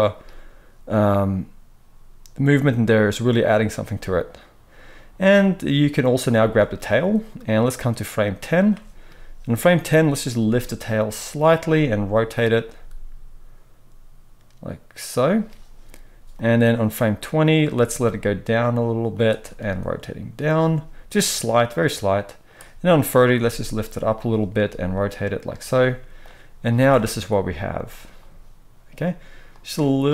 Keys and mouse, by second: 6.3 space, 6.6 middle click, 7.5-11.4 drag, 10.3 g, 11.4-16.3 middle drag, 11.6 r, 12.7 g, 16.3-19.1 drag, 18.0 g, 19.1-21.1 middle drag, 19.5 r, 21.1-24.2 drag, 23.3 g, 24.2-26.2 middle drag, 24.5 r, 26.2-30.1 drag, 26.7 space.